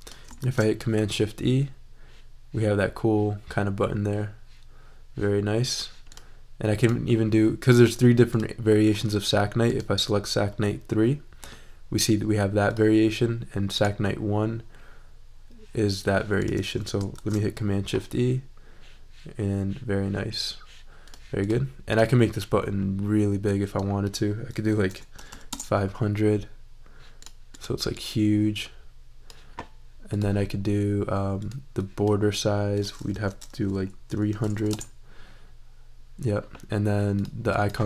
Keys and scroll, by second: 0.4 shift+super+e, 17.1 shift+super+e, 24.9 5, 25.1 0, 25.5 Return, 33.1 super+a, 34.0-34.9 typing.